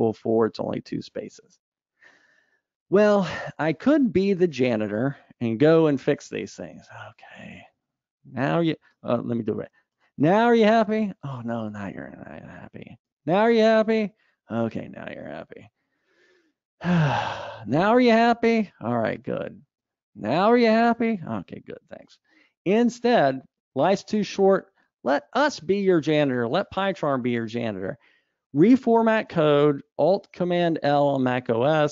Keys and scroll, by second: 22.4 super+z, 23.1 super+z, 24.2 super+z, 24.7 super+z, 25.2 super+z.